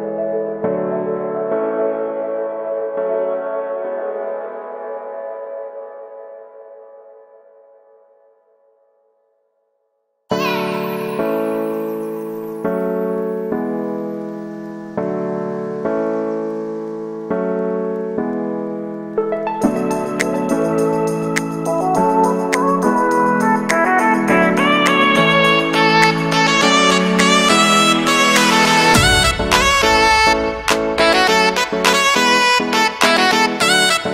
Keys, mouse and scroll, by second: 0.2 shift+n, 0.9 scroll down 1, 1.2 shift+middle click, 1.7 g, 3.5 scroll down 3, 3.6 shift+middle click, 4.0 scroll up 2, 4.2 shift+d, 5.6 scroll down 4, 5.7 middle click, 6.2-6.5 scroll up 5, 6.8 shift+middle click, 7.7 Tab, 7.9 w, 9.3 scroll down 1, 9.5-10.5 middle drag, 10.5 scroll up 3, 10.7 Tab, 10.8 scroll down 1, 11.0 shift+middle click, 11.8-12.6 scroll up 1, 12.6 click, 13.1 right click, 13.4 shift+s, 14.0 shift+a, 15.3-15.8 scroll down 1, 15.8-17.4 drag, 17.4 scroll down 1, 17.7 r, 19.7 scroll up 1, 19.9 s, 20.5 scroll up 1, 20.7 s, 21.5 scroll up 2, 21.7 scroll down 1, 22.4 s, 23.0 shift+middle click, 23.7 KP_Decimal, 24.1 scroll down 2, 24.4 g, 27.0 right click, 27.9 ctrl+b, 29.6 ctrl+KP_Add, 29.7 ctrl+KP_Add, 30.1 shift+d, 32.1 k, 32.8-33.5 scroll down 4, 33.1 middle click, 33.5 shift+middle click, 33.9 scroll down 1, 34.0 shift+middle click.